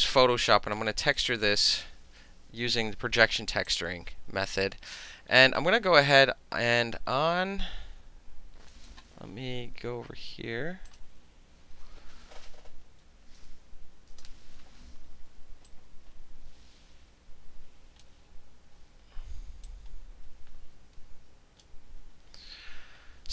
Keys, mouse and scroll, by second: 0.1 click, 0.6 alt+click, 0.9 alt+middle click, 1.2 alt+click, 3.7 click, 10.9 click, 13.1 c, 14.1 Return, 15.7-18.4 drag, 18.4-19.7 middle drag, 19.7-21.6 drag, 21.6-23.2 middle drag.